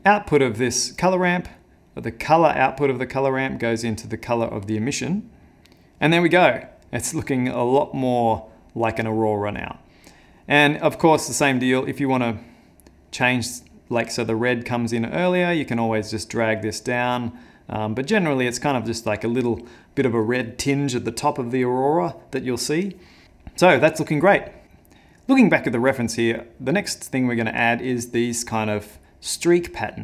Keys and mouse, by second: 0.0 middle click, 1.1 click, 1.9 click, 11.9 click, 13.7 click.